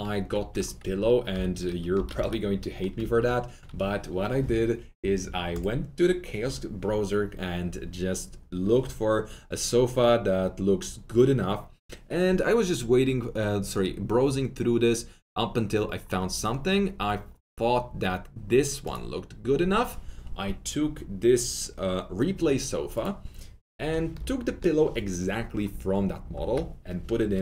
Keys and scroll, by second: 0.9 alt+F3, 1.3 alt+F4, 1.9 alt+F3, 2.1 alt+F4, 26.3 Delete.